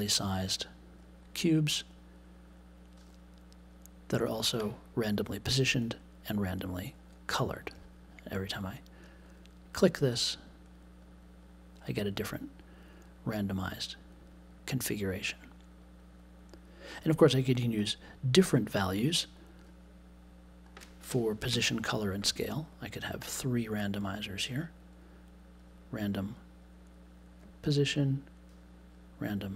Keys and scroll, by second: 21.5 \, 21.5 BackSpace.